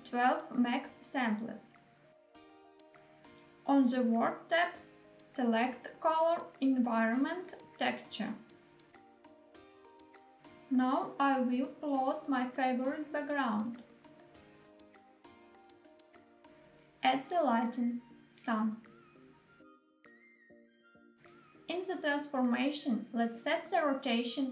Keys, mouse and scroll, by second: 3.1 click, 7.4 click, 10.1 click, 16.6 shift+a, 23.2 click.